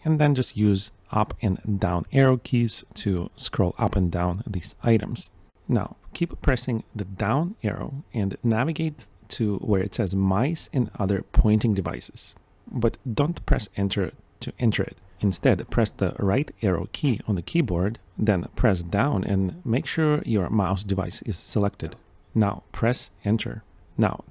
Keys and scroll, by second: 12.8 Down, 12.8 Return, 14.4 Escape, 23.5 Down, 23.8 Return.